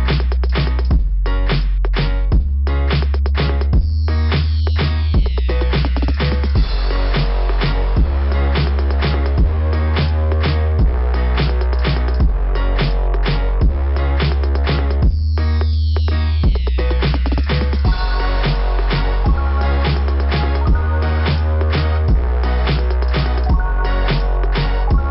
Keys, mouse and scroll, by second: 3.7 click, 3.9 click, 5.2 click, 5.4 click, 6.7 click, 6.8 click, 8.2 click, 8.3 click, 10.6 click, 10.9 click, 11.1 click, 11.2 click, 12.0 click, 12.1 click, 13.6 click, 13.8 click, 14.9 click, 15.0 click, 17.9 click.